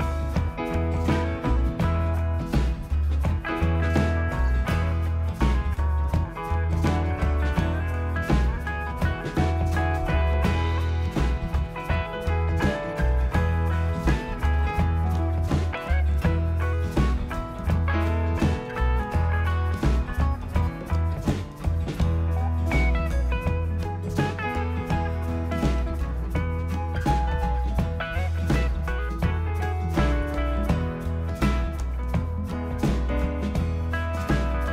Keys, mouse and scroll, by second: 0.1 click, 3.3 click, 9.6 click, 12.1 click, 15.1 shift+click, 17.7 click, 18.5 click, 19.4-21.3 scroll up 2, 21.3 click, 21.8 scroll, 23.2 click, 24.2 click, 27.0 click, 28.7 click, 29.3 click, 29.8-31.2 scroll, 31.2-32.7 scroll.